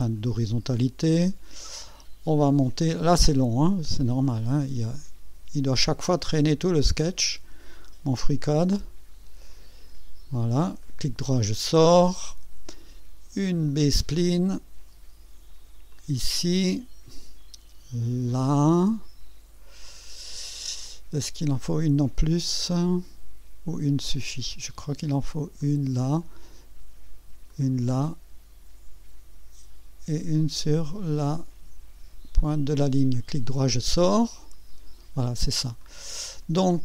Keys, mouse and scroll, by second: 0.1 click, 6.7 click, 10.8 right click, 13.7 click, 15.9 click, 25.6 click, 27.5 click, 32.4 click, 33.1 right click, 35.1 scroll up 1, 35.8 right click, 36.4 scroll up 1.